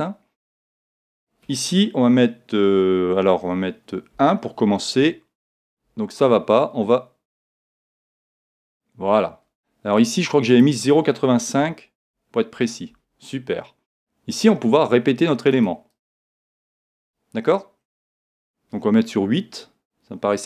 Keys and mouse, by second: 1.1 click, 7.5-11.9 drag, 15.5-18.7 drag.